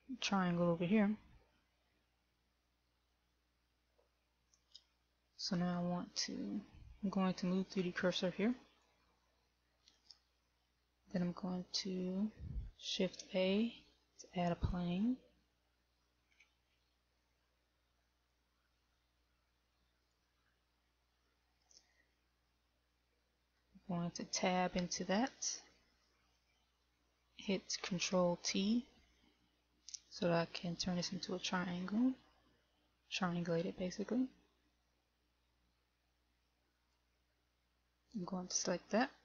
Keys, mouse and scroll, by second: 1.5-2.4 scroll up 4, 8.7 click, 13.1 shift+a, 16.3-17.1 scroll down 1, 17.1-17.8 scroll down 3, 18.8 click, 24.1 Tab, 28.1 ctrl+t, 34.1 a, 37.0 right click.